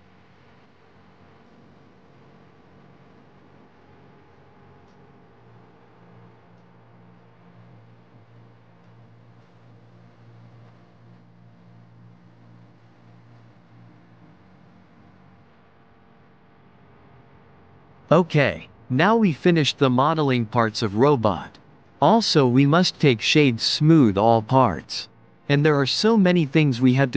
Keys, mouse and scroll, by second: 2.0-3.2 middle drag, 3.2 shift+d, 4.0 click, 5.3 r, 11.9 click, 13.8 click, 14.4-15.3 middle drag, 15.3 click, 15.9 shift+click, 18.8-19.7 middle drag, 19.7 click, 23.2 click, 23.7-25.6 middle drag, 25.6 click, 27.0 click.